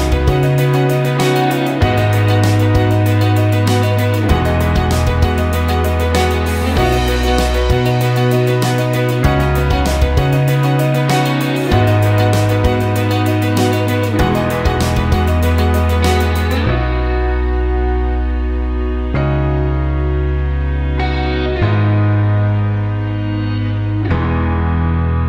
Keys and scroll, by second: 8.4 space.